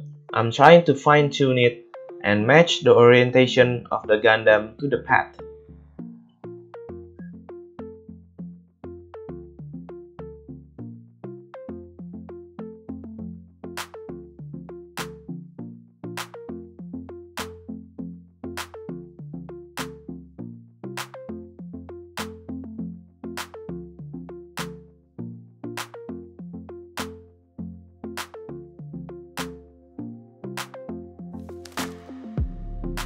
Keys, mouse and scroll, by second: 0.0-4.5 drag, 2.8 r, 4.5-6.4 middle drag, 5.8 a, 6.0 a, 6.4-12.4 drag, 8.6 ctrl+z, 9.0 r, 11.3 r, 12.4-16.8 middle drag, 13.1 r, 14.9 i, 16.8-18.0 drag, 18.1 a, 18.2 a, 19.3 KP_7, 19.9 r, 20.3 click, 21.0-33.0 middle drag, 21.2 r, 23.7 r.